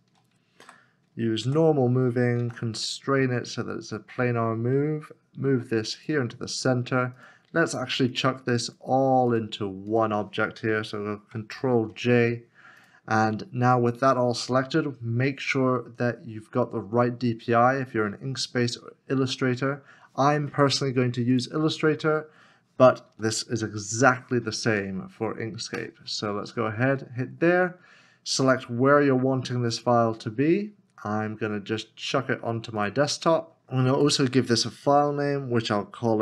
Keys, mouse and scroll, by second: 0.6 w, 1.4 g, 2.4 shift+z, 8.1 shift+click, 11.5 ctrl+j, 24.0 2.